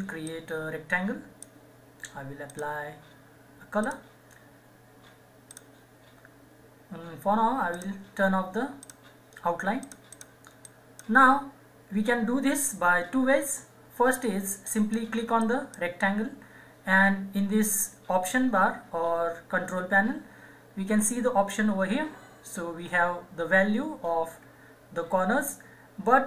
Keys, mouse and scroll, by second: 14.7 click.